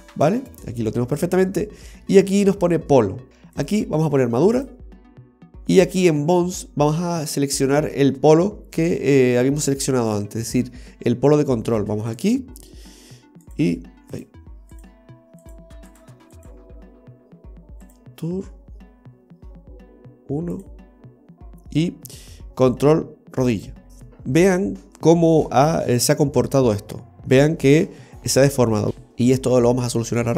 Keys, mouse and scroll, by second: 3.7 click, 12.2 click, 14.9 click, 16.5 click, 20.7 click, 29.1-29.4 scroll down 2, 29.4 middle click.